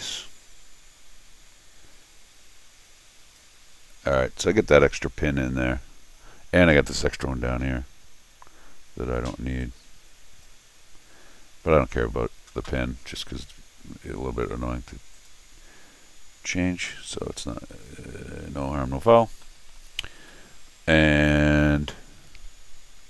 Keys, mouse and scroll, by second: 0.0-3.4 drag, 5.1 scroll down 1, 9.6 click, 15.1 click, 16.9 click, 19.2 scroll down 1, 19.4 middle click, 20.3 middle click.